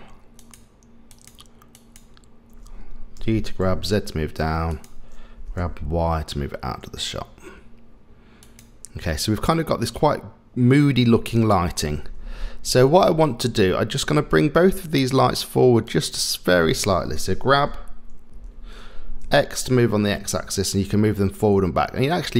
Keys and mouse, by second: 0.4 click, 1.1 click, 3.2 g, 5.4 g, 15.9 shift+click, 17.6 g.